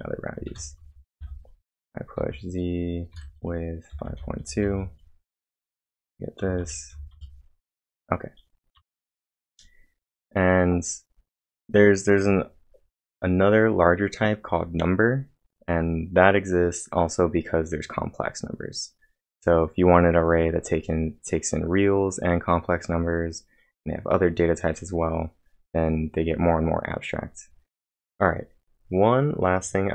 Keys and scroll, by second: 0.0-2.2 typing, 3.2-5.1 typing, 5.4 Return, 6.4 Up, 6.6 Return, 6.9 Up, 7.1 Return, 8.8 Return, 8.9 Return, 27.7 ctrl+l.